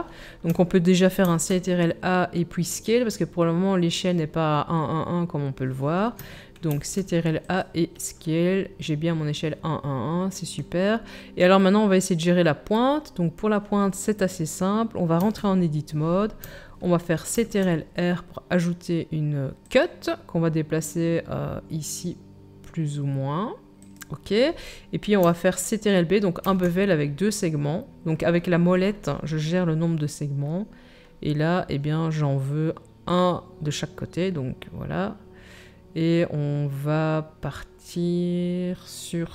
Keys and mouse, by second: 1.2 ctrl+a, 1.2-25.3 ctrl+drag, 6.7 ctrl+a, 15.2 Tab, 17.3 ctrl+r, 26.4 ctrl+b, 26.6-39.3 drag.